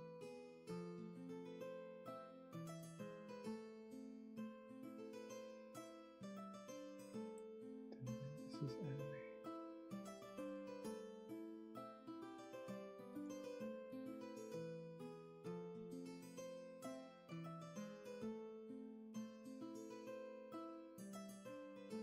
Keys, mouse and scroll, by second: 11.5 scroll down 1, 12.3 space, 13.4 scroll up 1, 18.6 ctrl+z.